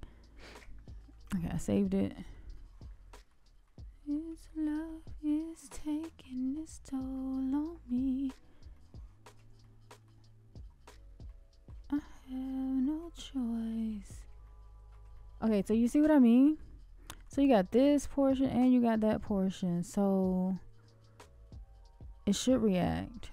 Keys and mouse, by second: 1.2-2.3 middle drag, 2.5-3.2 shift+middle drag, 3.6-4.1 middle drag, 5.2 shift+middle click, 7.1 shift+middle click, 8.7 shift+middle click, 9.6-10.0 middle drag, 11.2-11.6 middle drag, 11.9 shift+middle click, 13.9 shift+middle drag, 14.4-14.9 middle drag, 15.1 shift+middle drag, 16.5-17.2 shift+middle drag.